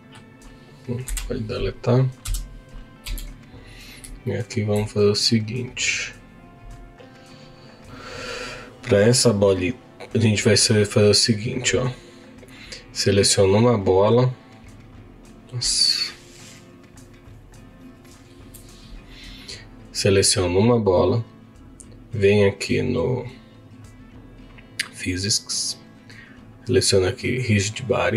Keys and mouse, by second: 1.2 Delete, 2.2 KP_1, 3.0 z, 4.3 shift+middle click, 21.7 click, 23.8 click, 25.9-28.1 drag.